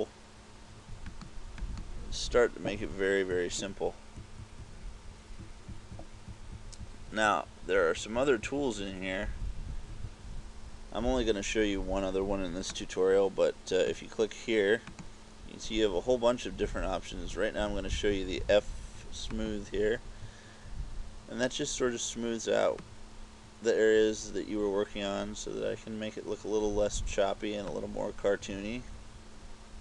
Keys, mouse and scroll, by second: 1.1 click, 1.7 click, 2.9-9.9 typing, 12.9 click, 15.1 click, 22.9 click, 28.3 KP_6, 28.6 KP_6.